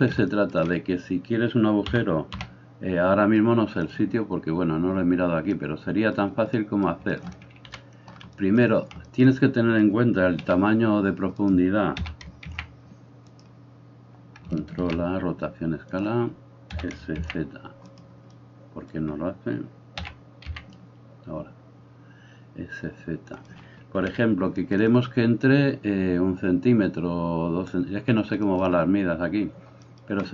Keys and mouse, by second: 1.9 g, 7.8 KP_1, 10.4 s, 12.0 s, 14.8 ctrl+a, 16.8 s, 24.0 KP_1.